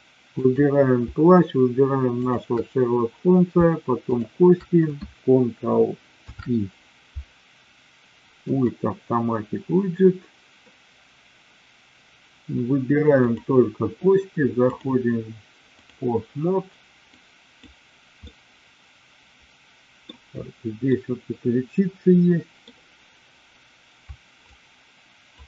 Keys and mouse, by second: 0.4 click, 2.1 shift+click, 4.0 shift+click, 6.1 ctrl+p, 13.2 click, 14.7-15.9 drag, 17.0-17.7 drag, 18.1-20.0 middle drag, 20.9-22.6 middle drag, 24.4-25.4 shift+drag.